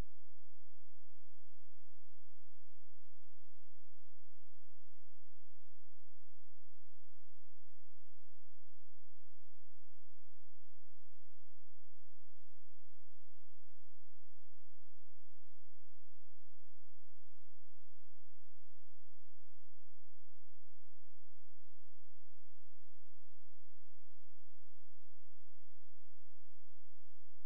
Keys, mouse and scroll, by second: 0.7 click, 0.9 click, 3.8 ctrl+z, 5.4 click, 19.6 click, 20.6-21.3 scroll up 1, 21.3-21.8 scroll down 1, 22.2-24.0 scroll up 1, 25.9 click.